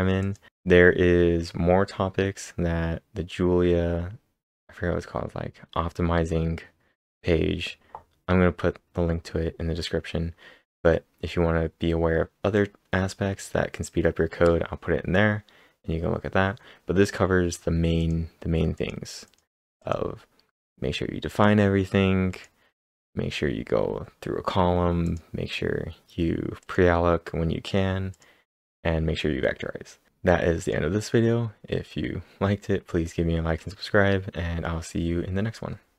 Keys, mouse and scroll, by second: 1.2 click, 18.0 click, 18.8 click, 19.0-19.8 typing, 19.3 click, 19.8 click, 21.3 click, 22.3 click, 24.8-25.5 typing, 25.0 click, 26.6 click, 28.1 click, 30.6-32.9 click, 32.7-33.4 typing.